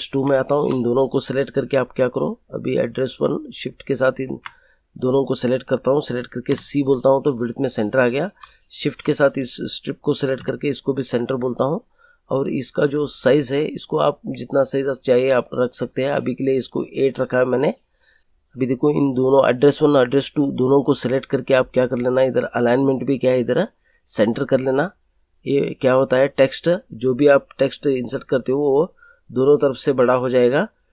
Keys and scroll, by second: 6.4 c, 10.3 c.